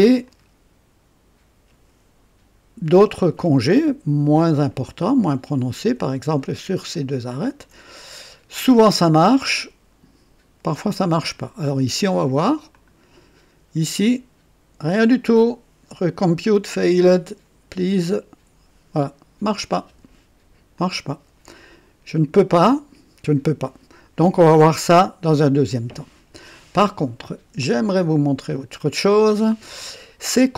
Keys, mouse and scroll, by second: 0.2-3.2 drag, 5.0 click, 7.3 ctrl+click, 12.7 click, 15.0 scroll up 2, 20.7 click, 22.6-23.8 drag, 28.0 click.